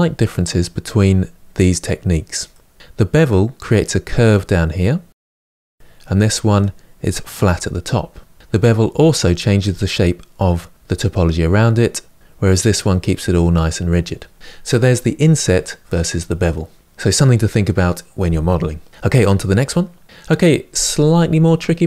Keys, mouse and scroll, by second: 19.8 Tab.